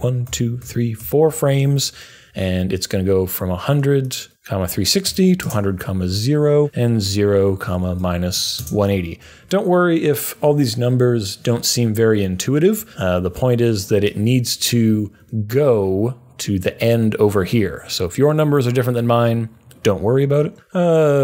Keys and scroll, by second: 0.2 Page_Down, 0.5 Page_Down, 1.0 Page_Down, 5.0 typing, 7.4-8.8 typing.